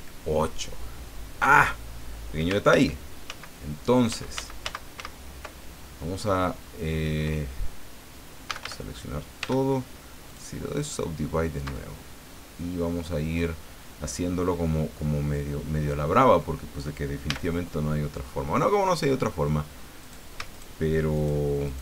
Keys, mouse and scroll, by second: 2.7 ctrl+z, 4.1 ctrl+z, 7.0 scroll down 2, 8.5 a, 9.4 w, 10.3 click, 11.2-11.7 scroll up 2, 11.9 scroll down 2, 12.3 click, 17.3 a, 20.0 right click, 20.5 shift+right click, 21.1 shift+right click, 21.7 shift+right click.